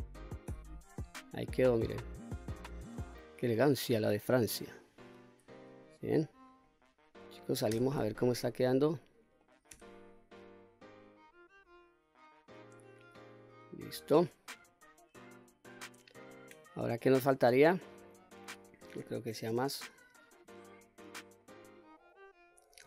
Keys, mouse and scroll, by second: 0.4 q, 1.1-1.5 scroll down 2, 1.5-2.7 middle drag, 3.6 middle click, 4.4-4.9 scroll up 1, 4.9-5.4 scroll down 1, 6.1 click, 6.6-7.1 scroll down 1, 7.1 middle click, 7.7 Tab, 8.4-9.4 middle drag, 9.7 Tab, 10.2-11.0 scroll up 4, 11.5 scroll up 1, 11.7 scroll down 1, 15.3 click, 16.1-16.5 scroll down 2, 16.5 middle click, 18.0 middle click, 19.0-19.5 scroll down 1, 19.5-21.4 middle drag, 21.8 middle click.